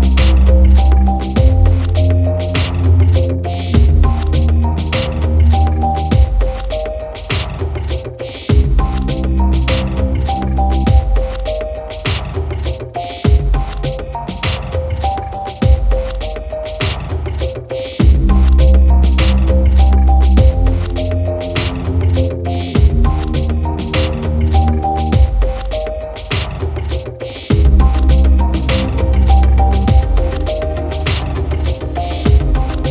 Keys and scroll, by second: 11.1 ctrl+=, 14.3 ctrl+0.